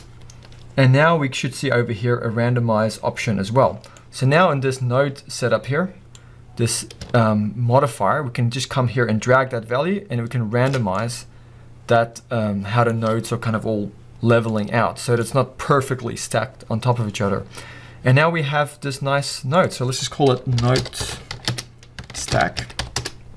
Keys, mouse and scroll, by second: 0.1 Return, 3.8 scroll down 2, 4.0-7.7 middle drag, 4.4-6.0 scroll up 2, 6.0-7.7 scroll up 1, 7.7 click, 11.0-23.0 middle drag, 23.0-23.3 drag, 23.1 Return.